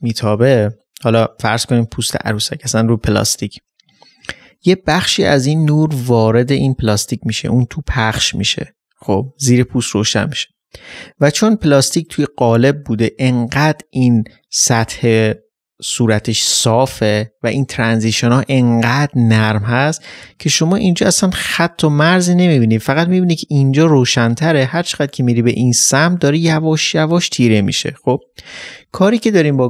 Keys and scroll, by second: 28.3 ctrl+z.